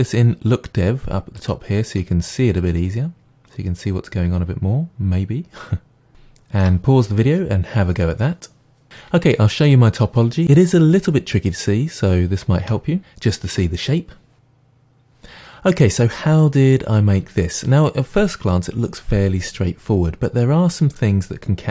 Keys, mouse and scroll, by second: 2.0-8.9 middle drag, 8.9 click, 12.6 Tab, 13.0 a.